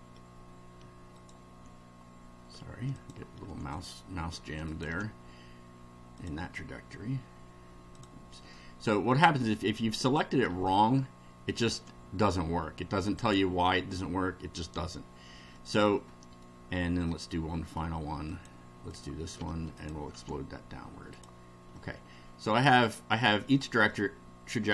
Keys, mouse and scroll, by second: 1.2 ctrl+click, 3.0 ctrl+click, 3.7 ctrl+click, 4.7 ctrl+click, 6.2 click, 7.9 click, 8.5 middle click, 9.9 ctrl+click, 11.5 ctrl+click, 13.2 click, 15.6-16.6 middle drag, 17.0 middle click, 18.3 click, 18.9 click, 19.8 ctrl+click, 21.2 click, 21.8-22.9 middle drag, 23.4-24.1 middle drag.